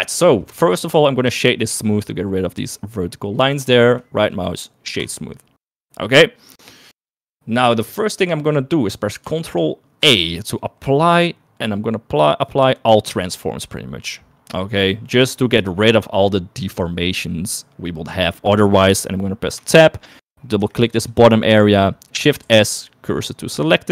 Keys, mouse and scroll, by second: 1.6 right click, 4.0 shift+middle click, 4.5 right click, 10.2 ctrl+a, 19.9 Tab, 20.0 middle click, 21.0 2, 21.1 click, 21.3 click, 22.0 shift+middle click, 22.3 middle click, 22.8 shift+s.